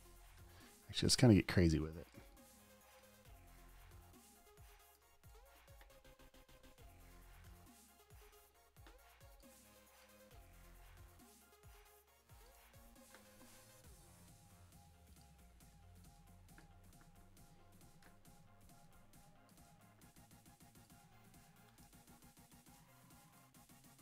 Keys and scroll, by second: 0.7 super+t, 5.7 alt+v, 7.8 2, 8.6 v, 12.9 v, 18.4 super+t, 21.9 super+BackSpace, 22.2 v, 22.8 super+a, 23.0 v, 23.8 super+d.